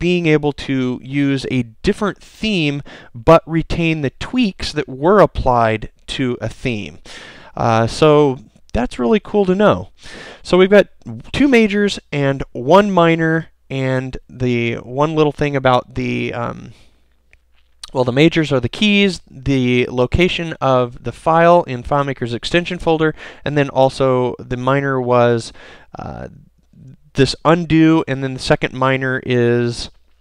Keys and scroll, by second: 14.2 super+b.